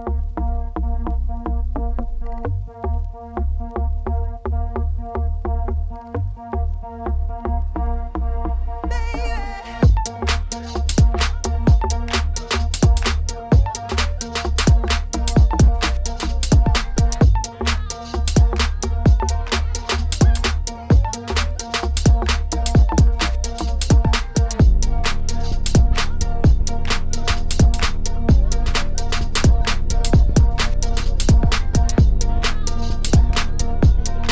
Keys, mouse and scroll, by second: 0.1 middle click, 0.8 scroll down 1, 1.0 shift+middle click, 1.5 ctrl+1, 2.2 right click, 2.9 ctrl+2, 3.1 right click, 3.4 Tab, 3.6 ctrl+r, 4.3 ctrl+r, 6.9 ctrl+r, 8.1 middle click, 8.4 Tab, 8.5-10.6 middle drag, 10.6 click, 11.2 ctrl+1, 11.8 scroll up 2, 12.2 middle click, 13.2 ctrl+2, 13.4 right click, 13.9 Tab, 14.5 ctrl+r, 16.7 middle click, 16.9 ctrl+r, 17.5-19.2 middle drag, 19.2 1, 19.4 click, 19.5 shift+click, 19.7 middle click, 20.3 j, 20.5 middle click, 21.0 click, 21.2 middle click, 21.5 shift+click, 21.8 j, 22.0-23.1 middle drag, 23.1 ctrl+r, 24.5 middle click, 25.5 click, 25.9 alt+click, 26.4 g, 27.5 middle click, 28.4 click, 28.8 alt+click, 29.0 middle click, 29.4 g, 30.5 middle click, 30.9 ctrl+r, 32.6 alt+click, 32.9 KP_3, 33.5 g.